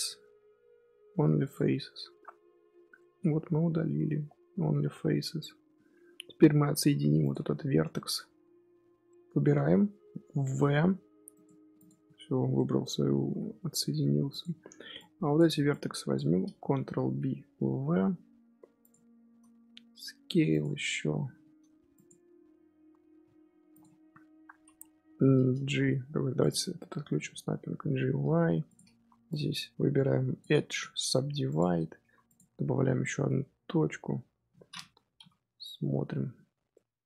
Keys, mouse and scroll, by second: 1.8-2.2 scroll down 1, 2.2 middle click, 2.8 scroll down 1, 2.9-4.2 middle drag, 4.2-6.0 scroll up 2, 6.0-6.6 scroll up 3, 6.6 1, 7.1 click, 7.5-7.8 scroll down 4, 7.8 shift+middle click, 8.1-9.0 scroll up 3, 9.0-10.6 middle drag, 10.6 v, 11.7 click, 13.2 g, 14.9 click, 15.6 shift+click, 16.8 ctrl+b, 19.2 a, 19.6 s, 20.7 Tab, 21.1 g, 22.9 Tab, 23.1-23.6 scroll up 3, 23.6 click, 24.7-25.6 scroll up 1, 25.6-26.2 scroll up 1, 26.3 click, 27.1 g, 29.0 2, 29.2 click, 30.6-31.9 right drag, 31.9 1, 32.2 click, 33.4 KP_1, 35.1 ctrl+KP_3, 36.1-36.6 scroll up 5, 36.6 shift+middle click.